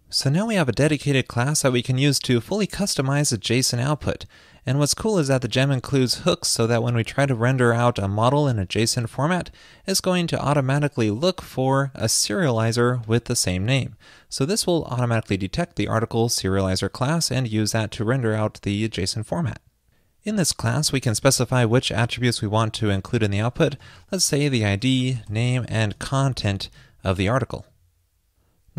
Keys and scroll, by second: 26.8 super+s.